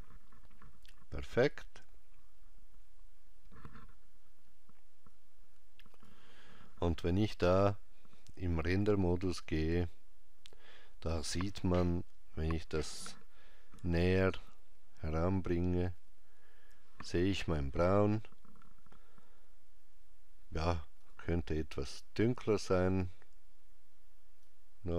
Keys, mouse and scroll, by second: 5.1 click, 8.2 click, 14.1 ctrl+middle click, 21.1 click.